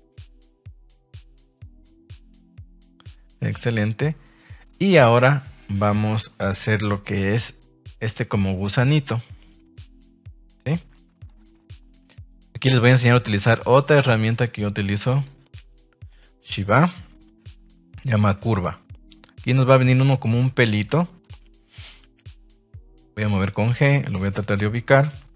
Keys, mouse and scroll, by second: 0.4 middle click, 0.8 shift+middle click, 1.4 ctrl+s, 6.2 middle click, 6.6 shift+middle drag, 10.6-11.2 middle drag, 11.3 shift+middle click, 11.7 middle drag, 12.2 shift+middle drag, 13.1 KP_3, 13.8 ctrl+s, 14.3 shift+middle drag, 15.0 shift+middle drag, 16.1 click, 16.5 shift+a, 19.6-20.7 middle drag, 21.0 shift+middle click, 22.8 click, 23.1-23.4 middle drag, 23.7 g, 24.5 click, 24.7-25.2 middle drag.